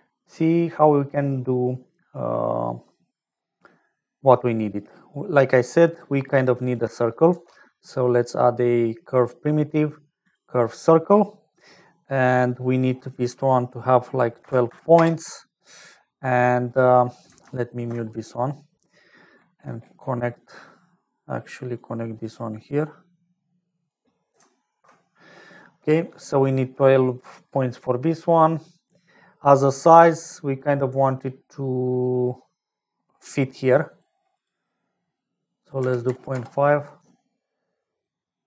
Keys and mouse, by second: 5.1 middle click, 6.6 click, 7.3 shift+a, 13.3-15.9 drag, 16.5 middle click, 17.5 ctrl+alt+click, 19.2 click, 20.2 click, 21.7-23.8 drag, 24.6 ctrl+alt+click, 25.6 middle click, 28.4 middle click, 30.2-34.0 shift+drag, 34.3-38.4 drag.